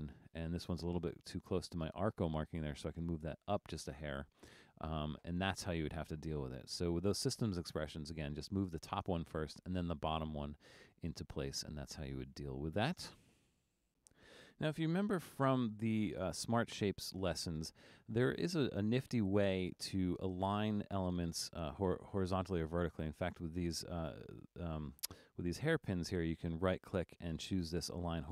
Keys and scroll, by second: 15.5 super+=, 15.9 super+=, 16.5 super+=.